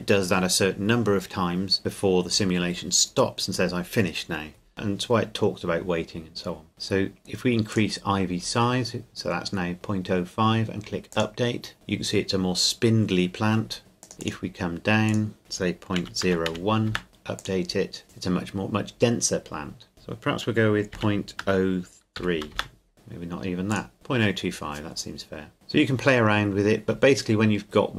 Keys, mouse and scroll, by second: 7.7 click, 11.1 click, 14.0 click, 16.0 KP_Decimal, 16.2 KP_0, 16.5 KP_1, 16.9 KP_Enter, 17.4 click, 19.9 click, 20.9 KP_Decimal, 21.4 KP_0, 22.2 KP_3, 22.5 KP_Enter, 22.9 click, 23.7 click, 25.5-27.1 scroll down 1.